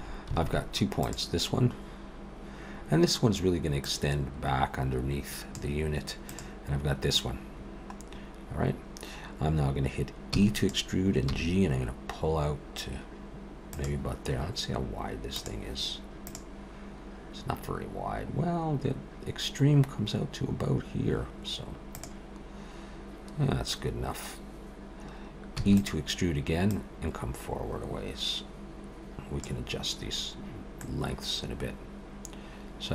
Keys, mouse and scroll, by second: 0.4 alt+a, 1.0 click, 2.8-3.4 scroll down 1, 3.4-3.8 scroll down 3, 3.8 click, 6.3 click, 8.1-9.3 scroll up 1, 10.3 e, 11.3 g, 25.6 e, 26.7 click, 30.8 middle click.